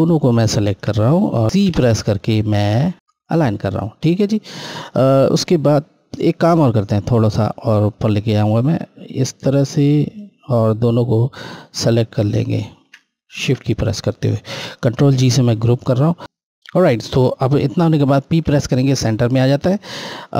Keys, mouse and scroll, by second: 0.7 shift+click, 1.7 c, 3.4 scroll down 1, 4.4 click, 5.0 scroll up 1, 7.6 click, 11.4 Left, 11.9 ctrl+Left, 13.2 shift+Left, 14.8 ctrl+g, 18.4 p, 19.9 click.